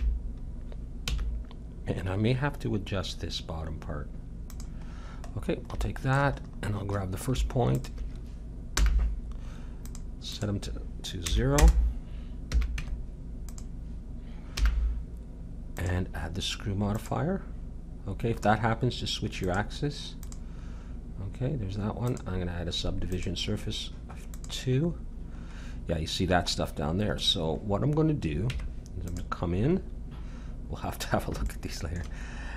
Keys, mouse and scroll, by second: 4.9-7.7 middle drag, 7.7-9.7 drag, 8.7 n, 9.9-12.3 drag, 12.5 a, 12.8 Tab, 14.6 n, 15.7-17.5 drag, 19.4-22.0 drag, 23.2 click, 24.4-26.3 drag, 26.3 middle click, 28.5 Tab, 29.7-31.5 middle drag, 32.0 Tab.